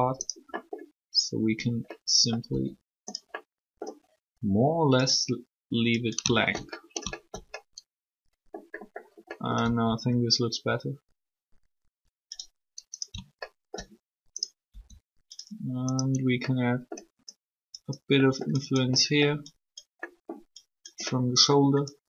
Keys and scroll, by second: 2.5 r, 9.6 r, 14.7 alt+r.